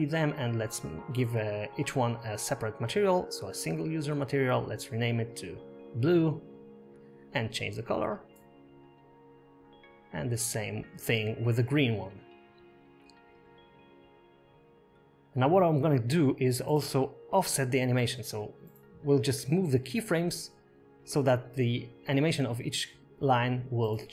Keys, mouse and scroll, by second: 2.9 click, 4.8 click, 5.4 click, 9.6 click, 14.5 click, 16.2 click, 16.5 click, 17.9 shift+e, 19.8 click, 22.6 click, 22.9-23.5 scroll down 4, 23.5 KP_0.